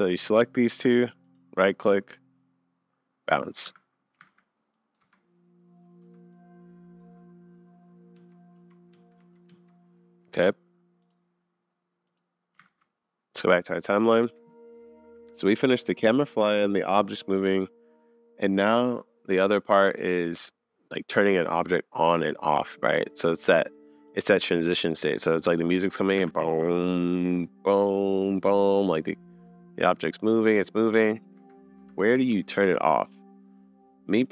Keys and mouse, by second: 0.1-0.6 drag, 3.6 click, 4.3 super+s, 4.7 click, 5.0 space, 6.0 space, 6.3 click, 8.1 Up, 8.6 Down, 8.9 Up, 9.2 Down, 9.5 Up, 11.2 click, 12.6 super+s, 24.5 middle click, 26.2 space, 31.4-32.7 typing, 34.2-34.3 drag.